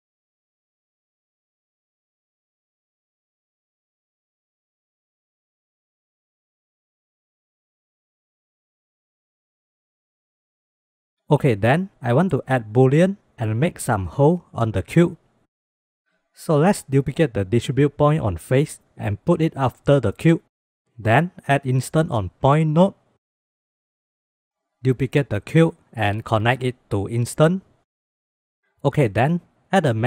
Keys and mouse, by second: 3.1 click, 3.9 click, 4.9-6.2 drag, 7.0-8.2 drag, 8.6 click, 9.0 click, 9.5 click, 9.7 click, 10.3 click, 10.5 click, 16.3 click, 17.0 click, 17.9-18.5 drag, 18.8 click, 19.2 shift+d, 21.0 click, 21.4 click, 21.9 shift+a, 24.8 click, 25.6 shift+d, 26.7-27.5 drag, 28.4 shift+drag, 29.5 shift+a.